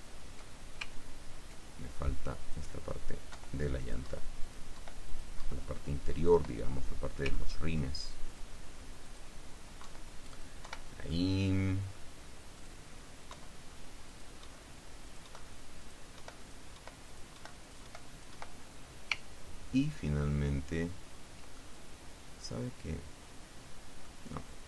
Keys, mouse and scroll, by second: 0.2 ctrl+scroll down 1, 1.1 ctrl+scroll up 1, 2.6 click, 3.5 Delete, 4.0 click, 4.2 Delete, 4.6 click, 5.3 click, 6.3 click, 6.5 Delete, 7.5-7.9 ctrl+scroll up 2, 8.5 click, 9.2 click, 10.3 Delete, 10.5 click, 10.8 Delete, 11.7 click, 11.9 middle click, 12.6 click, 13.5 Delete, 14.3-14.7 drag, 14.7 Delete, 15.3 click, 15.4 Delete, 15.9 click, 16.5 Delete, 16.5 click, 17.2 click, 17.7 click, 18.3 click, 19.4 ctrl+scroll down 2, 19.7 ctrl+scroll up 1, 19.9 ctrl+scroll down 1, 20.0-22.4 ctrl+scroll up 1, 22.4-24.3 drag.